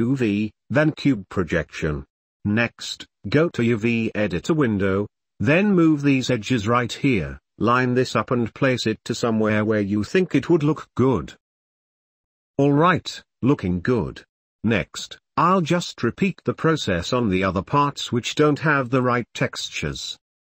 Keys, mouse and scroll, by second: 1.1 click, 5.8 shift+click, 6.9 s, 8.4 g, 9.8 r, 11.1 s, 11.4 g, 12.0 Tab, 12.1 middle drag, 12.2 drag, 12.3 middle drag, 12.4 drag, 12.8 ctrl+middle click, 13.0 ctrl+s, 13.2 middle click, 13.4 shift+click, 13.9-16.1 middle drag, 16.2 middle click, 16.4 shift+Tab, 16.4 shift+click, 16.6 u, 16.7 shift+middle click, 16.8 s, 16.9 Tab, 17.1 middle click, 17.1 middle click, 17.4 Tab, 17.4 middle click, 17.6 Tab, 17.7 Tab, 17.9-20.4 typing, 18.1 middle drag, 18.4 Tab, 18.8 Tab, 18.9 Tab, 19.1 Tab, 19.4 Tab, 19.6 Tab, 20.0 middle click, 20.1 Tab.